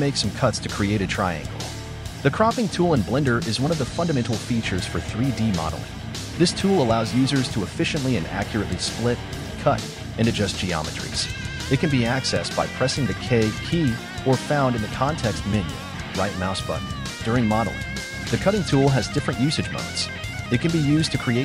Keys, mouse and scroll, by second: 1.3 right click, 1.7 Tab, 2.6 scroll up 3, 3.3 shift+middle click, 3.9-7.0 scroll up 4, 7.5-9.5 shift+middle drag, 9.5 k, 10.4 scroll up 2.